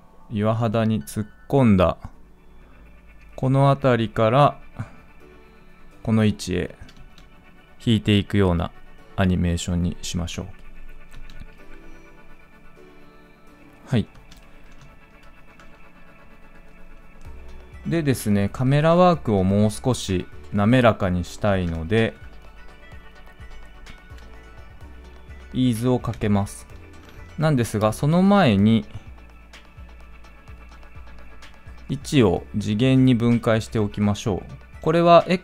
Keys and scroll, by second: 26.9 ctrl+z.